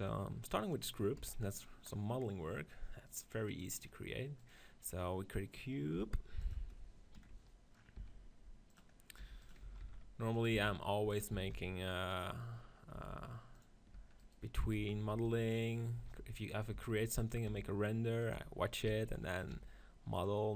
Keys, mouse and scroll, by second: 1.0 KP_1, 1.8-3.9 middle drag, 3.9-4.9 drag, 4.9-7.0 middle drag, 5.8 g, 7.8 s, 9.1 g, 9.5 s, 10.4 s, 11.2 s, 12.8 s, 13.8 Tab, 14.6-19.4 typing, 15.6 click, 16.5-18.7 right drag, 18.7 click, 19.7 click, 20.4 middle click.